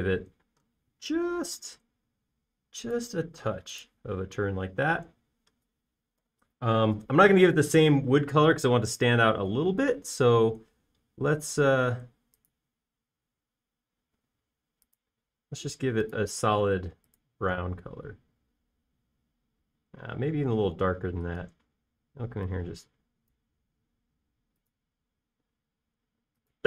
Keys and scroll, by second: 1.6 q, 5.2 space, 7.2 b, 18.9 space.